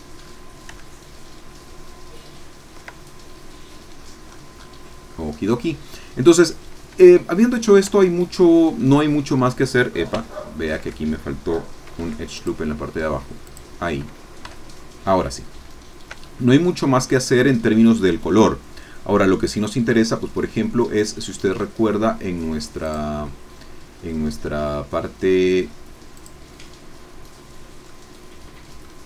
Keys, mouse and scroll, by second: 0.1-0.5 shift+scroll up 3, 0.7-2.8 ctrl+middle drag, 2.8 ctrl+scroll up 2, 3.0-3.7 ctrl+scroll down 3, 3.7 middle click, 3.9 scroll down 2, 4.2 middle click, 4.3-4.8 scroll up 4, 4.5 middle click, 4.8 middle click, 5.0-5.4 scroll down 2, 5.4 scroll up 2, 5.7 middle click, 7.9 Tab, 10.2 Tab, 11.9 ctrl+r, 12.3 ctrl+click, 13.4 click, 14.4 Tab, 15.4 scroll down 2, 16.1 shift+scroll down 2, 16.8 shift+click, 18.4 click, 22.8 click, 27.9-28.9 middle drag.